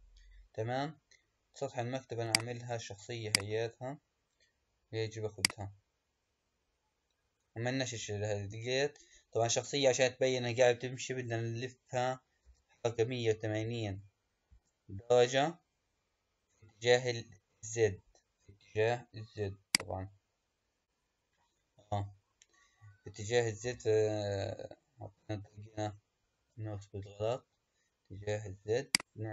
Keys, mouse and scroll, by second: 12.3 r, 23.5 r.